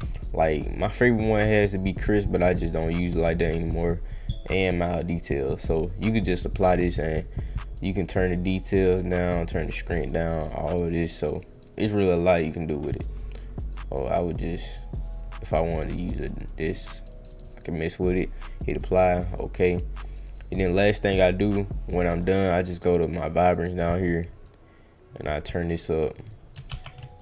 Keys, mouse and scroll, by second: 0.2 click, 1.0-1.5 middle drag, 1.0-1.5 scroll down 1, 2.4 click, 2.9 click, 3.3 click, 4.6 click, 7.9 click, 8.5 drag, 9.1 click, 9.7 drag, 10.2 click, 10.6 click, 10.8 click, 11.2 click, 11.3 click, 12.5 click, 13.6 click, 14.4 click, 16.0-16.3 drag, 16.5 click, 16.8 click, 17.1 click, 17.3 click, 18.1 click, 18.5 click, 19.2 click, 21.6 click, 23.2 click, 24.1 click, 24.7 click, 26.6 ctrl+z, 27.1 click.